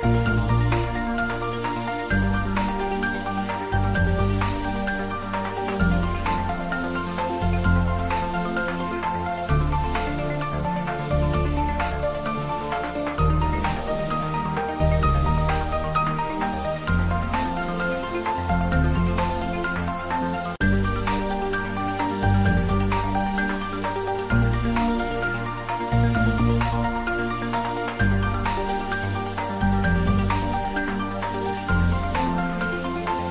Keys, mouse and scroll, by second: 0.6 click, 1.0 middle click, 2.0 click, 3.8 click, 4.5 click, 6.9 space, 8.4 space, 13.1 space, 18.4 click, 19.8 middle click, 22.5 click, 23.1 middle click, 24.9 click, 26.4 middle click, 27.6 click, 28.4 middle click, 29.1 click, 30.3 middle click, 31.5 click, 31.8 middle click, 32.6 click.